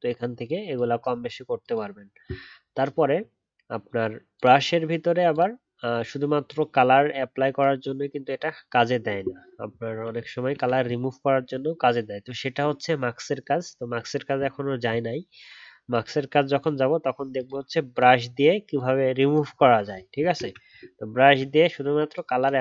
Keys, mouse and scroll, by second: 20.3 ctrl+z.